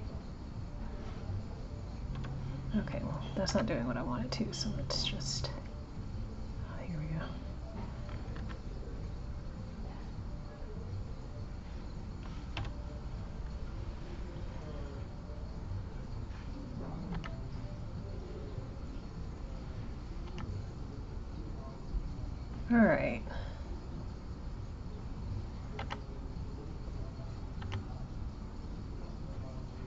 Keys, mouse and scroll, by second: 15.3 click, 19.3 click, 24.9 click.